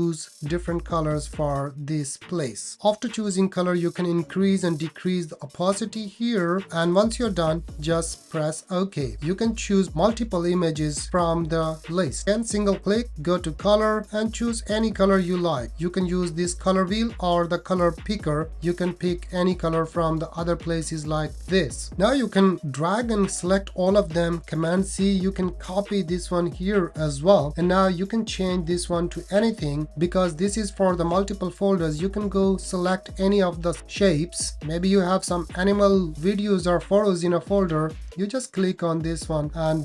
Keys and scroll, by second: 24.7 super+c, 25.6 super+v.